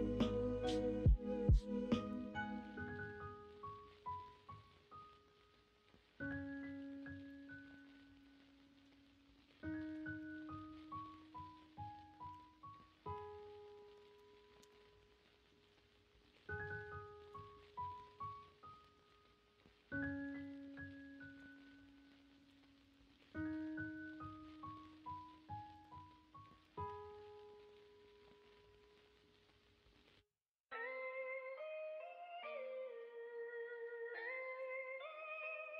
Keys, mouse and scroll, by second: 0.8 c, 7.2 middle click, 8.2 middle click, 10.1 shift+d, 12.3 y, 14.0 ctrl+z, 18.1 g, 18.9 ctrl+z, 20.4 shift+d, 22.4 p, 23.9 middle click, 24.5 Tab, 26.6 middle click, 35.3-35.7 middle drag.